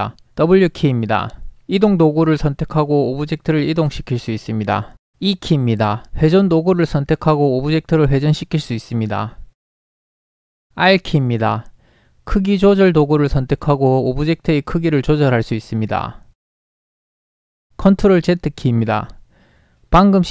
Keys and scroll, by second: 0.4 w, 5.4 e, 11.0 r, 18.4 ctrl+z.